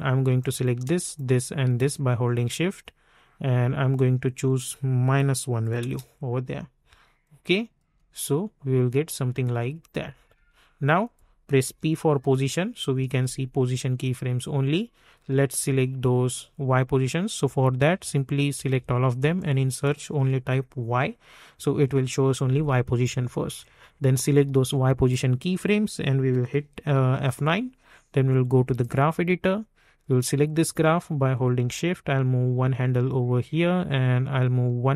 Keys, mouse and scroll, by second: 0.4 click, 4.4 click, 5.4 -, 5.8 Return, 7.2 click, 7.8 space, 11.0 click, 11.6-12.2 typing, 18.5 typing, 18.7 ctrl+a, 19.3 click, 20.3 y, 22.8-27.2 drag, 27.2 F9, 28.8-34.3 drag, 34.3-34.9 drag.